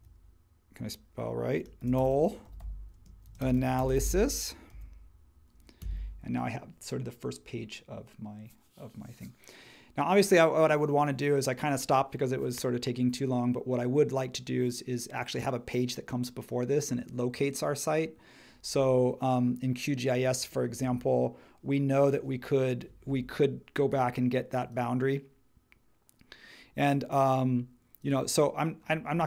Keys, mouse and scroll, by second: 0.0-0.4 typing, 1.5-5.2 typing, 5.8 Return.